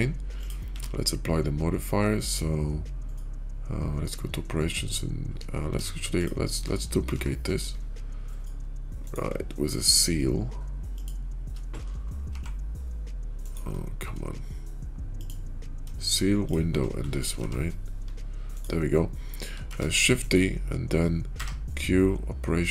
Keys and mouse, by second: 0.5 q, 7.0 g, 9.2 middle drag, 9.7-11.5 shift+middle drag, 11.9 middle drag, 12.1 g, 15.1 click, 15.9 shift+click, 17.3 g, 19.6 shift+d, 21.2 q.